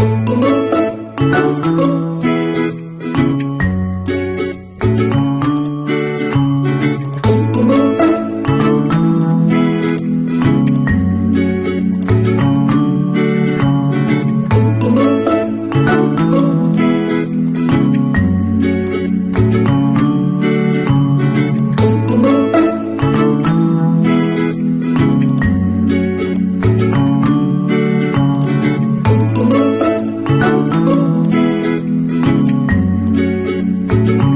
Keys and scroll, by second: 0.4 ctrl+d, 6.8 shift+w, 8.3 ctrl+a, 15.9 ctrl+a.